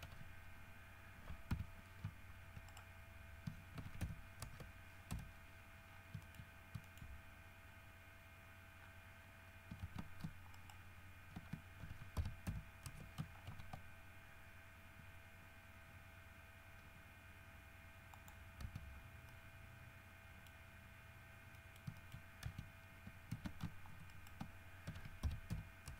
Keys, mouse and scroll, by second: 0.2 shift+e, 1.7 2, 2.9 shift+right click, 4.0 shift+e, 4.2 shift+KP_1, 4.6 shift+KP_Enter, 5.3 KP_3, 6.1-6.4 scroll down 3, 6.4 shift+middle click, 6.6-8.5 shift+scroll up 8, 7.1 shift+middle click, 9.0-9.7 scroll down 4, 10.0 alt+a, 10.8 alt+shift+right click, 12.0 alt+shift+e, 12.4 shift+KP_Subtract, 12.7 shift+KP_1, 13.1 shift+KP_Enter, 13.7 ctrl+shift+e, 18.4 middle click, 18.8 Tab, 19.2 scroll down 2, 19.5 middle click, 20.1 middle click, 20.4 middle click, 20.7 scroll up 1, 21.4-21.8 scroll down 1, 21.8 middle click, 22.3 shift+middle click, 22.4 shift+scroll up 1, 22.4 shift+middle click, 22.6 shift+Tab, 23.5 alt+a, 24.3 alt+shift+right click, 25.1 alt+shift+e, 25.4 shift+KP_Subtract, 25.7 shift+KP_1.